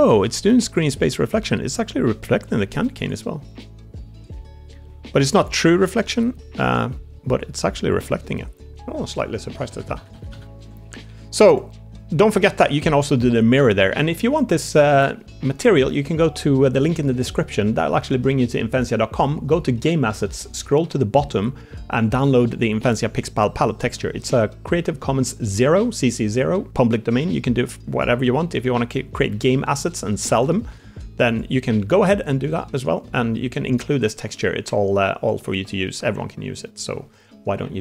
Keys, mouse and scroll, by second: 0.4 middle click, 0.4 click, 0.4 middle click, 1.2 g, 3.4 middle click, 4.3 g, 5.5 middle click, 5.5 g, 5.8 g, 6.8 middle click, 7.6 middle click, 8.6 g, 9.0 Tab, 9.5 ctrl+z, 9.7 ctrl+z, 9.8 ctrl+z, 10.0 ctrl+z, 10.2 ctrl+z, 11.0 Tab, 11.4 click, 28.1 drag, 28.2 middle click, 28.8 shift+middle drag, 29.2 middle drag, 29.7 middle drag, 30.2 click, 30.6 z, 32.3-35.5 drag, 35.7-36.1 middle drag, 36.5 middle drag, 37.2 middle drag.